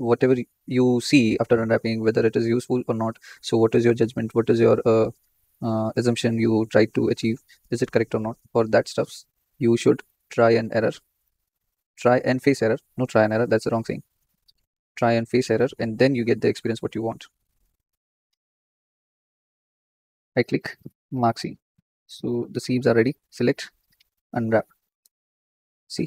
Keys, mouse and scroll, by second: 0.0 shift+click, 0.1-1.7 shift+middle drag, 1.7 shift+click, 2.5 shift+click, 2.7-4.0 shift+middle drag, 4.0 shift+click, 4.1 shift+middle click, 5.0 shift+click, 5.2 shift+middle click, 6.2 shift+click, 7.2 shift+click, 7.4 shift+middle click, 8.3 shift+click, 9.1 shift+click, 9.5-10.9 shift+middle drag, 10.9 shift+click, 11.0 shift+middle click, 11.9 shift+click, 13.2 shift+click, 13.5 middle click, 14.4 KP_1, 15.1-17.3 shift+middle drag, 17.3 shift+click, 18.0-18.4 scroll up 2, 18.4 ctrl+z, 19.2 shift+click, 19.8 ctrl+z, 21.4 right click, 21.5-22.4 scroll down 9, 22.4 shift+middle click, 23.0 a, 24.2 click.